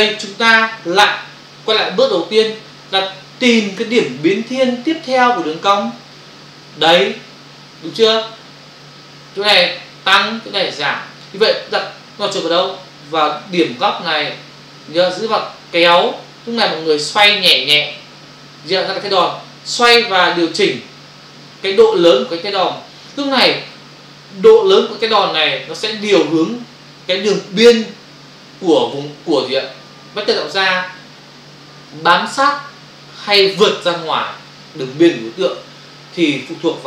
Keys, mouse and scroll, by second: 15.1 click.